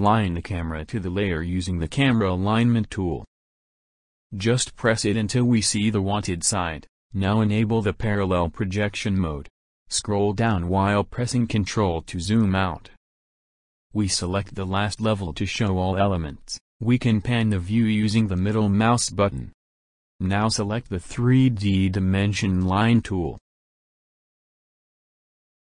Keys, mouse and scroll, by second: 4.1 click, 5.1 click, 6.0 click, 8.6 click, 11.7 ctrl+middle click, 12.1 ctrl+middle click, 12.1-12.8 ctrl+scroll up 2, 12.6 ctrl+middle click, 13.0 ctrl+middle click, 15.3 click, 17.8-18.8 middle drag, 22.2 click, 24.7 ctrl+middle click, 24.7-25.6 ctrl+scroll up 4.